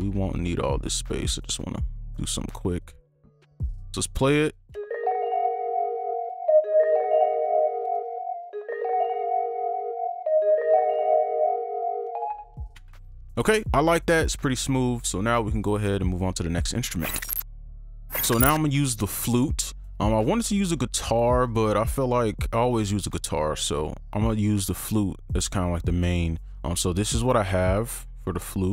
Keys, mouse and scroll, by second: 3.9 right click, 4.7 space, 5.3-6.2 scroll up 1, 6.2 right click, 8.0 ctrl+click, 10.1 right click, 12.5 right click, 27.9-28.7 scroll down 1.